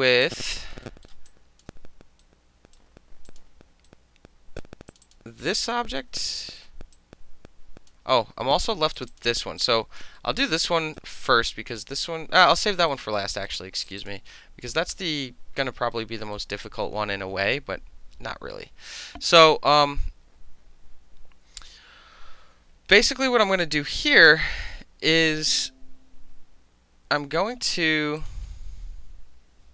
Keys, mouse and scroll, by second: 0.1 alt+middle click, 0.2 alt+click, 0.4 alt+middle click, 0.6 alt+right click, 0.7 alt+middle click, 1.0 alt+middle click, 1.3 alt+click, 1.6-2.2 alt+middle drag, 2.2-2.7 alt+right drag, 2.7-3.3 alt+middle drag, 3.3 click, 3.4 middle click, 3.9-4.6 right drag, 4.6 middle click, 4.9 click, 5.0 middle click, 5.0 click, 5.1-6.3 middle drag, 6.6 alt+middle click, 6.9 alt+click, 7.9-9.0 alt+middle drag, 9.0 alt+click, 9.0 alt+middle click, 9.1 alt+click, 9.2 alt+middle click, 9.6 alt+click, 10.0 alt+middle click, 10.4 alt+middle click, 10.5 alt+right click, 10.9-12.6 alt+middle drag, 12.9 alt+middle click, 13.0 alt+right click, 13.1 alt+middle click, 13.5 alt+middle click, 13.9 alt+click, 14.0 alt+click, 14.1 alt+middle click, 15.9 alt+middle click, 23.5 alt+middle click, 24.0-28.2 alt+middle drag, 28.2 alt+click, 28.3 alt+middle click.